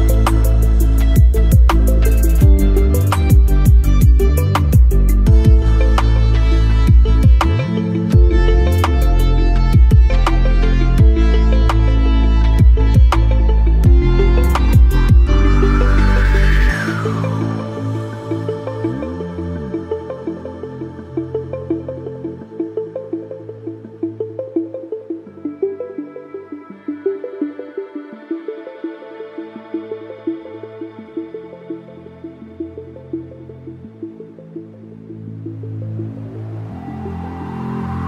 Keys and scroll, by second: 22.3 Right, 28.5 Up.